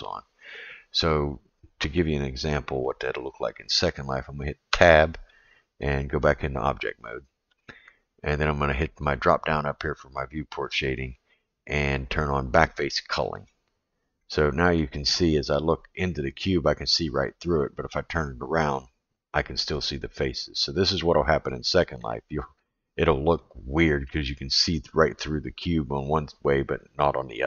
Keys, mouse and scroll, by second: 4.7 Tab, 9.2-13.9 drag, 14.2-14.8 middle drag, 17.6-18.6 middle drag, 19.7-21.5 middle drag, 22.0-22.6 middle drag, 23.4-24.1 middle drag, 25.2-27.4 middle drag.